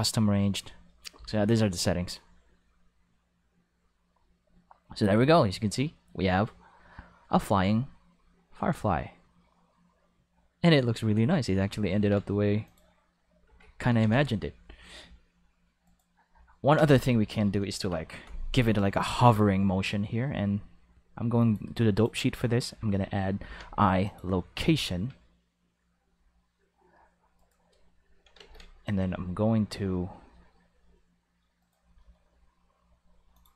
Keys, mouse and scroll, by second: 12.0 ctrl+Tab, 12.7 click, 13.5 alt+a, 14.0 ctrl+s, 15.9 right click, 16.8 space, 21.4 click, 22.0 click, 23.4 i, 24.0 click, 26.1 r, 27.4 right click, 28.4 ctrl+s, 31.6 right click, 31.8 g, 33.3 click.